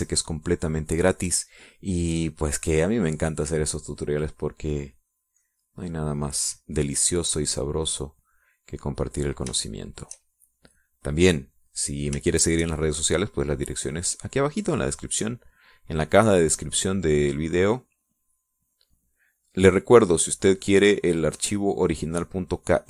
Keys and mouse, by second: 5.1-9.1 drag, 9.7-10.7 drag, 10.8 shift+click, 12.7 click, 13.7 shift+click, 14.1-22.8 shift+drag.